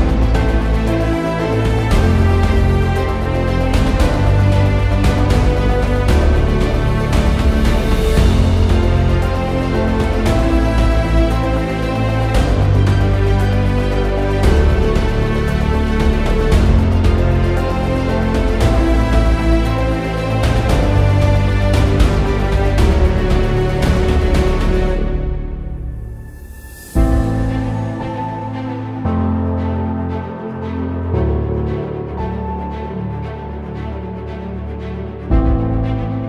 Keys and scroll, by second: 3.1-3.8 typing, 18.2 Print.